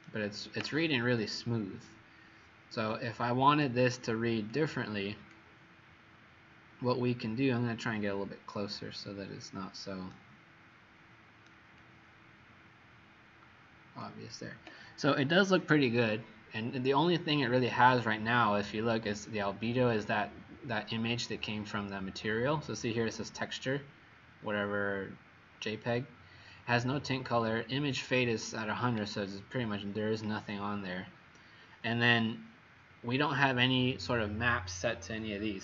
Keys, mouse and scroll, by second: 4.4 click, 5.8-6.1 scroll up 2, 10.1 right click, 11.7 click, 30.2-30.7 scroll down 1.